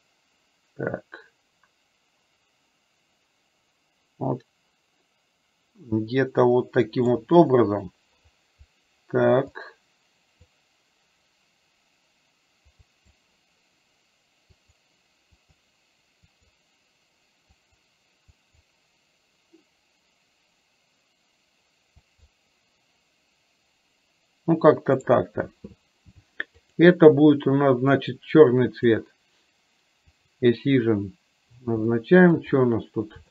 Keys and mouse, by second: 26.7 click, 30.2 click, 32.0 middle click.